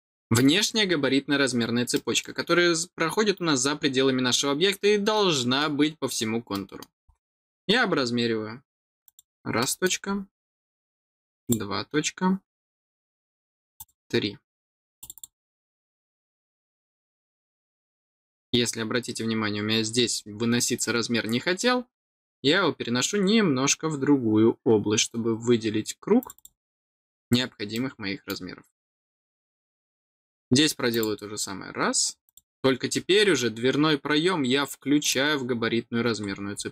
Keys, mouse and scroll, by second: 1.8 middle click, 5.0 middle click, 6.4 middle click, 7.1 scroll down 1, 9.0 click, 9.5 middle click, 11.3 click, 13.7 click, 14.9 click, 15.1 click, 26.1 click, 26.3 click, 27.0 scroll down 1, 27.6 middle click, 29.1 middle click, 29.9 scroll down 1, 30.8 click, 32.2 click, 32.8-33.2 scroll down 2, 34.9 click, 36.2 middle click, 36.2 scroll down 1.